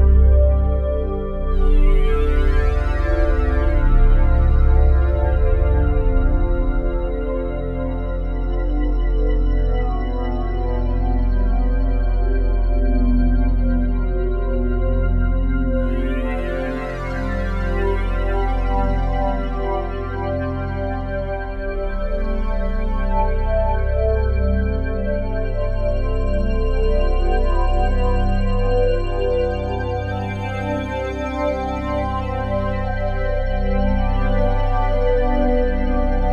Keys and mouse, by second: 0.0-0.1 typing, 0.1 Return, 0.6-1.7 drag, 2.3-3.9 typing, 3.4 click, 4.3 click, 5.1 typing, 6.9-8.7 typing, 7.0 click, 7.9 click, 8.9 Return, 10.6-12.1 alt+drag, 12.6 alt+click, 13.9 click, 14.6 click, 16.0 click, 16.9 0, 17.1 Return, 17.8-19.9 drag, 19.9 0, 20.2 Return, 20.8 click, 22.8 click, 23.5 click, 24.2 alt+click, 25.4 ctrl+alt+click, 26.6-27.8 ctrl+alt+drag, 30.0 7, 31.8 click, 31.8 typing, 32.5 click, 33.9 shift+click, 34.1 shift+click.